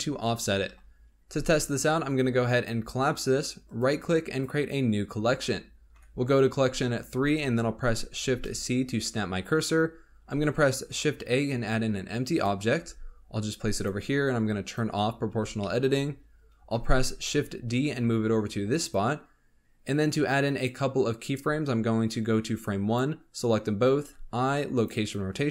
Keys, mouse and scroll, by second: 0.6 KP_7, 2.5 click, 3.6-5.9 right drag, 5.9 3, 8.1 shift+c, 9.7 scroll up 2, 10.3 shift+a, 12.8 g, 14.6 click, 15.5-16.9 shift+middle drag, 16.9 shift+d, 20.5-22.7 drag, 24.0 i.